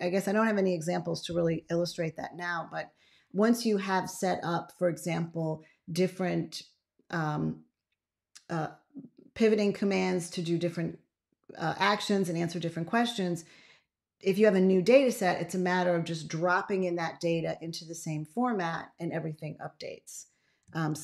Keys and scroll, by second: 20.8 ctrl+x.